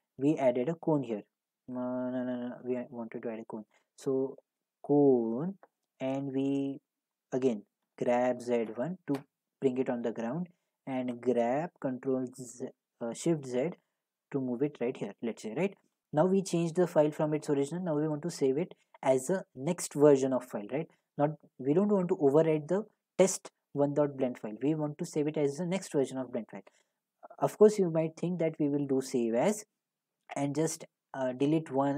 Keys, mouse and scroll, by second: 1.0 click, 2.6 Delete, 3.3 a, 5.2 click, 7.8-9.2 typing, 11.1 g, 12.0 z, 14.8 click, 17.4 middle click, 29.0 click.